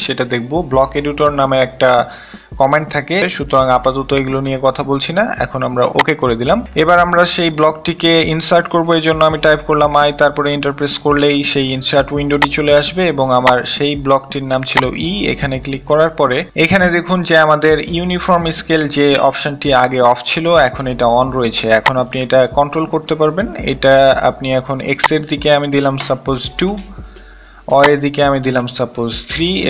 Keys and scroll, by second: 7.5 i, 7.7 Return, 25.3 2.